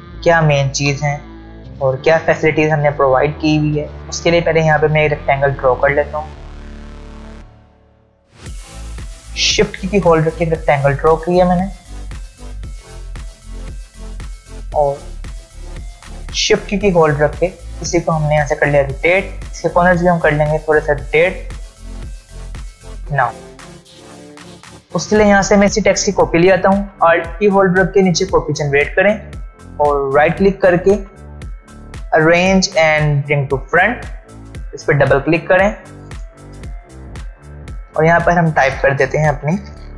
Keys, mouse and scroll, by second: 1.6-3.0 alt+scroll up 2, 3.0 space, 3.1-3.7 click, 3.5 space, 8.3 click, 9.6-12.1 shift+drag, 12.9 v, 13.2-14.4 drag, 19.6-20.8 click, 25.6 click, 30.1 right click, 32.2 click.